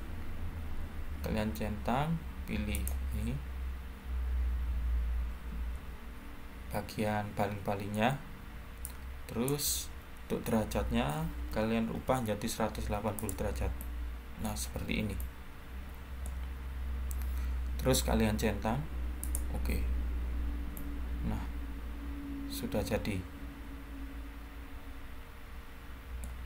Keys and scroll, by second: 10.6-11.9 typing.